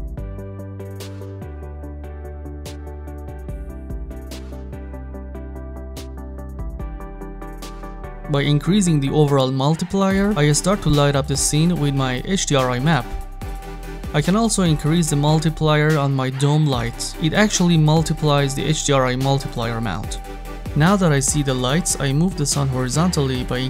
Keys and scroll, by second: 10.3 3, 10.7 Return, 18.2 1, 18.4 Return, 22.6 9, 23.0 Return.